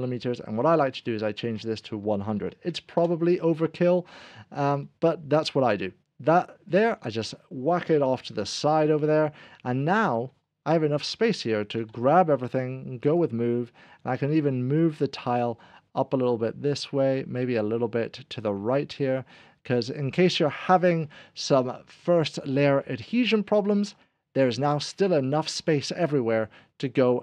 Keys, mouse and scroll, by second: 0.3 Delete, 0.3 click, 2.0 1, 2.4 0, 2.9 Return, 4.9 click, 4.9 1, 4.9 0, 8.8 click, 11.8 ctrl+0, 13.1 Return, 13.1 ctrl+a, 13.1 click, 13.8 Return, 13.8 scroll down 1, 15.5 click.